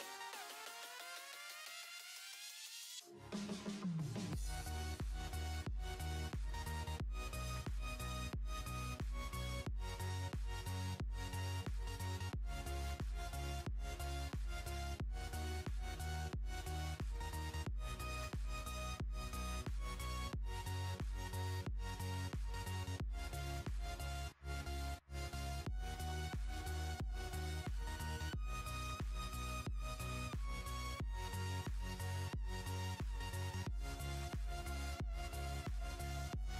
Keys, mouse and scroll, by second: 0.0 ctrl+z, 0.2-2.5 drag, 2.8 ctrl+z, 3.5 ctrl+click, 3.8 click, 4.5 click, 4.8 ctrl+z, 5.1-6.5 drag, 6.5 ctrl+z, 6.8-9.7 drag, 9.7 space, 9.7-11.6 drag, 12.0 space, 12.1 click, 12.1 space, 12.8-14.2 drag, 14.2 space, 14.3 click, 14.4 space, 15.1 click, 16.4 alt+scroll down 1, 17.1 alt+scroll up 1, 17.6 space, 17.7 click, 17.8 space, 18.3 click, 19.1 ctrl+z, 19.8 ctrl+z, 20.1 space, 20.1 click, 20.2 space, 20.5 ctrl+shift+z, 21.2 alt+scroll down 1, 21.4 ctrl+z, 22.6 alt+scroll down 1, 22.8 ctrl+shift+z, 23.1 space, 23.2 click, 24.9 click, 25.1 alt+scroll down 1, 25.3 alt+scroll up 1, 25.4 alt+scroll down 1, 25.6 alt+scroll up 1, 25.7 alt+scroll down 1, 25.8 alt+scroll up 1, 25.9 alt+scroll down 1, 26.0 alt+scroll up 1, 26.2 space, 26.2 click, 26.3 space, 26.6-28.1 drag, 28.4 ctrl+z, 29.3 shift+click, 29.9 ctrl+z, 30.2-33.4 drag, 33.6-35.4 drag, 35.6 alt+scroll down 2, 35.6 alt+scroll up 2, 35.8 alt+scroll down 2, 35.8 alt+scroll up 2, 36.1 alt+scroll down 2, 36.1-36.4 alt+scroll up 2, 36.4 alt+scroll down 1.